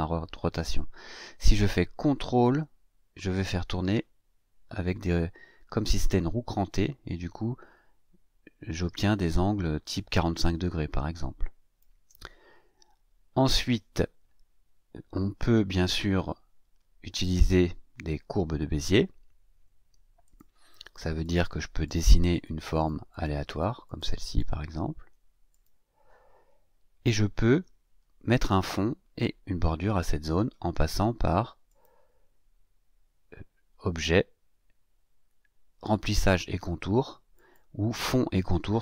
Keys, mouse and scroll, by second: 2.4-12.0 ctrl+drag, 20.2 click, 21.1 click, 21.8 click, 22.3 click, 22.7 click, 23.0 click, 23.5 click, 23.8-24.5 drag, 25.5 click, 31.6 click, 37.3 click.